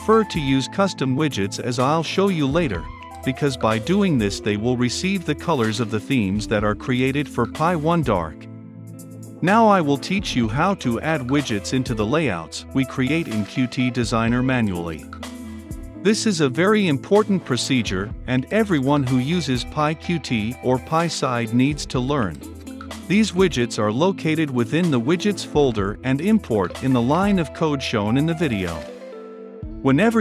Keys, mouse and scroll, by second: 5.6-6.8 typing, 6.2 Return, 6.6 Return, 7.0 ctrl+F5, 8.3-11.3 drag, 11.5-16.4 drag, 16.4-19.5 middle drag, 16.4-19.5 scroll down 2, 19.5-23.3 drag, 23.3 Return, 23.8-28.9 drag, 28.9-30.2 middle drag, 28.9-30.2 scroll down 2.